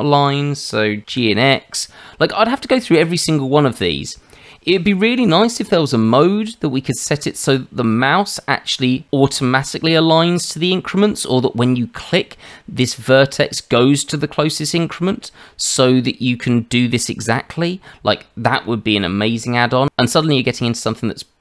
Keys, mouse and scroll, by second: 1.0 g, 3.3 shift+middle click.